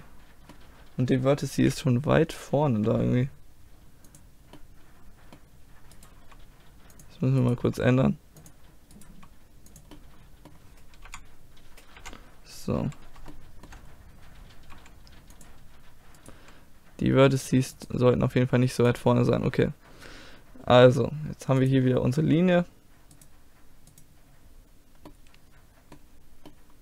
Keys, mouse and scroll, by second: 0.3 click, 0.7 middle click, 1.6 KP_1, 2.7 g, 4.6-6.0 middle drag, 6.0 right click, 6.2 g, 7.0 click, 7.6 g, 9.1 g, 9.7 click, 10.5 middle click, 11.1 KP_3, 12.0 KP_1, 12.8 middle click, 14.8 g, 16.2-18.2 right drag, 16.4 g, 18.0 g, 18.2-19.4 drag, 19.4-20.7 middle drag, 21.6-23.6 middle drag, 23.6-25.1 drag, 25.1 middle click.